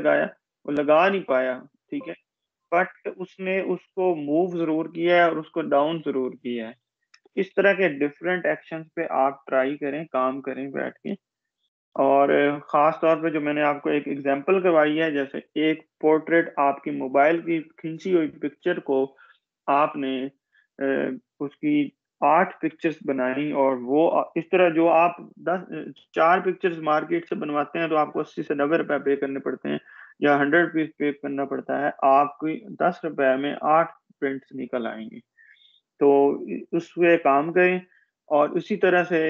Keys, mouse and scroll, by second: 6.0 Escape, 8.9 click, 36.4 click.